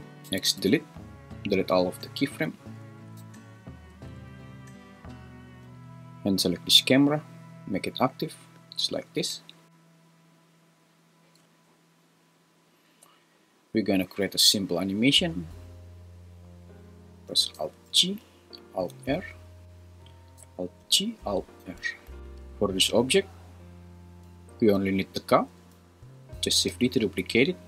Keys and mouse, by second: 0.2 x, 2.9 a, 3.2 x, 4.1 `, 17.9 alt+g, 18.9 alt+r, 20.8 alt+g, 21.6 alt+r, 22.2 super+z, 22.2 g, 24.6 click, 26.7 shift+d, 27.2 Escape.